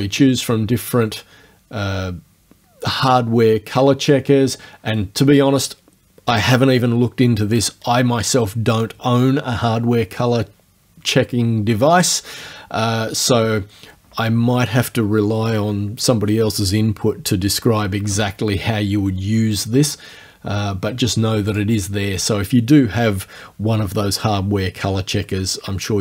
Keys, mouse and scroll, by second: 4.1 click, 21.5 click.